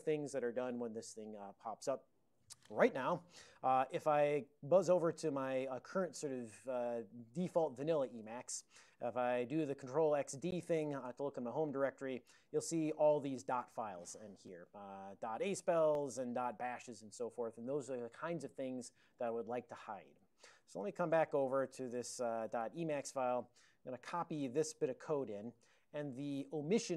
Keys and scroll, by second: 0.4 Right, 4.4 super+j, 6.7 ctrl+x, 6.9 ctrl+s, 8.2 ctrl+x, 10.5 d, 11.1 Return, 12.4 ctrl+n, 12.6 ctrl+n, 13.9 ctrl+x, 14.1 1, 14.6 ctrl+n, 14.8 ctrl+n, 15.0 ctrl+n, 15.1-16.3 ctrl+n, 20.5 ctrl+x, 20.6-21.8 typing, 22.6 alt+>, 23.4 super+j, 24.0 ctrl+a, 24.4 ctrl+p, 24.4 typing, 25.9 ctrl+n, 26.4 ctrl+n, 26.6 ctrl+n.